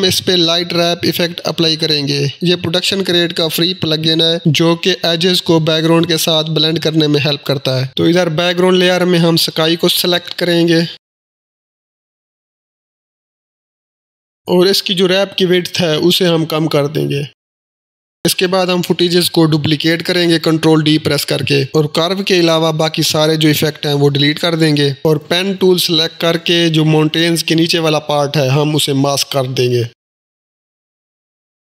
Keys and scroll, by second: 0.3 Down, 0.6 Return, 7.8 Return, 12.2 v, 16.3-17.2 typing, 18.9 ctrl+d, 24.6 ctrl+Delete.